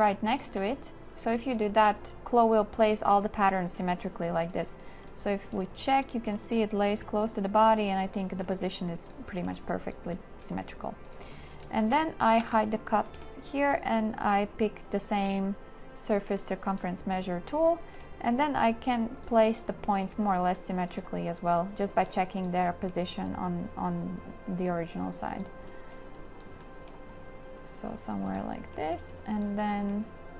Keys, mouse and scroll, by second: 0.3 shift+click, 1.6 shift+click, 11.8 shift+q.